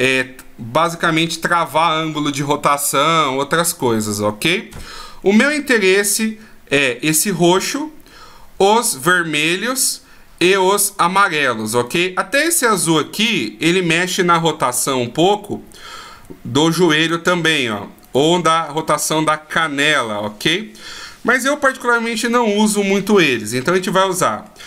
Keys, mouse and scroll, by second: 0.0 right click, 6.0-6.7 scroll down 1, 6.7 scroll down 1, 8.1-9.9 scroll up 1, 10.2-11.4 scroll up 1, 12.0 right click, 12.5 middle click, 14.8 g, 18.2 right click, 18.8 right click, 20.0 r, 23.8-24.3 scroll down 2, 24.2 middle click.